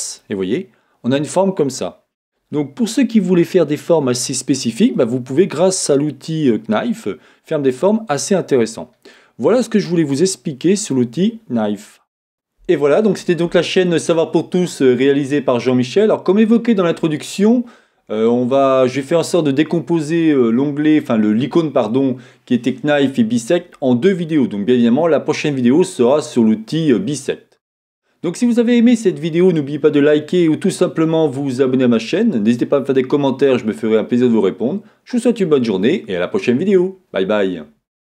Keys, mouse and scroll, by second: 4.3-5.4 middle drag, 4.3-5.4 scroll up 1, 6.1 middle click, 8.2 middle click, 9.6 middle click, 9.6 scroll up 2, 9.6-10.1 scroll down 2, 10.1 middle click, 11.0-12.4 scroll up 1, 12.4-38.1 middle drag, 12.4-15.0 scroll down 2, 15.0-38.1 scroll down 1.